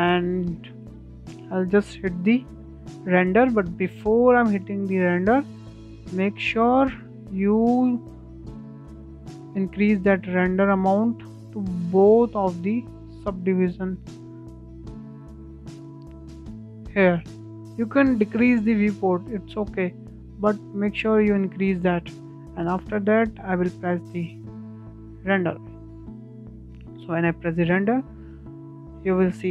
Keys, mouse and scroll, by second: 2.7 scroll down 3, 2.9-3.4 shift+middle drag, 3.4 click, 5.0 click, 6.4 click, 7.8-9.5 drag, 10.4 click, 11.0 click, 12.6 click, 15.0 click, 17.4-22.1 drag, 22.1 KP_0, 24.2 click, 25.1 F12.